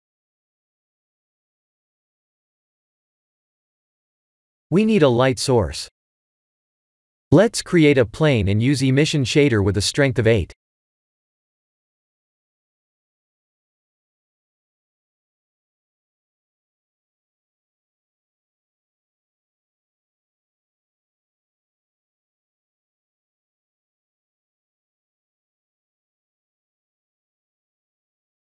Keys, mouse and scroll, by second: 2.7 shift+a, 5.1 click, 6.3 scroll down 1, 6.8 middle click, 6.8 scroll down 4, 7.5 shift+a, 10.1 click, 11.8-13.1 scroll down 6, 13.2 scroll down 3, 13.3 click, 14.3 s, 17.9 click, 19.0 click, 22.0 click, 22.4 click, 26.0 click.